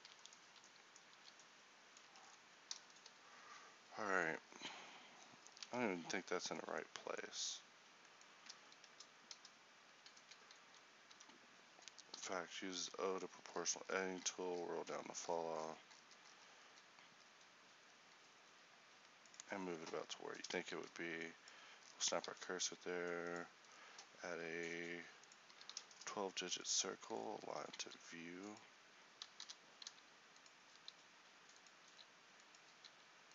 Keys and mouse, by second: 1.2 f, 2.1 Tab, 3.6 a, 5.7 Tab, 7.4 z, 8.9 ctrl+n, 11.2 z, 12.2 o, 13.0 g, 20.1 middle click, 22.0 shift+middle click, 22.0 shift+Tab, 27.5 Tab, 27.9 s, 29.5 o, 29.9 s, 30.8 s, 32.9 s.